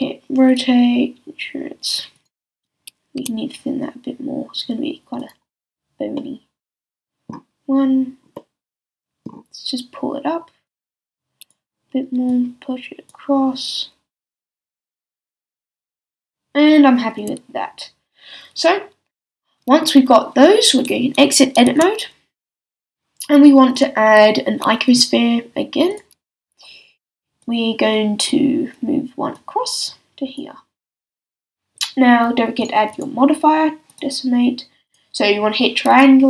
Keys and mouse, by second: 2.5 z, 3.2 s, 5.2 super+middle click, 5.3 super+click, 5.8 click, 14.0 click, 17.2 a, 21.7 Tab, 23.7-25.0 drag, 26.0-27.4 middle drag, 27.4-34.7 drag, 34.7 middle click, 34.8-36.2 drag.